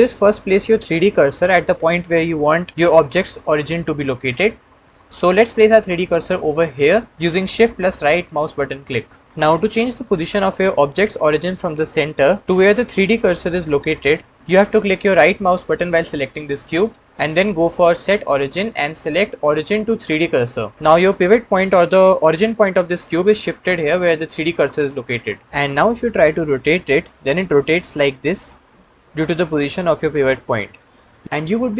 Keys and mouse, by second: 7.5-8.9 shift+middle drag, 16.5-20.7 right drag, 26.7 r.